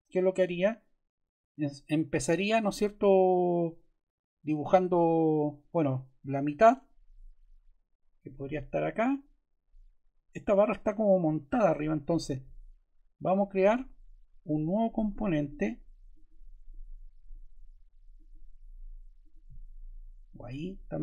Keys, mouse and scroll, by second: 14.6 click, 16.0 click, 17.6 ctrl+z, 18.0 click.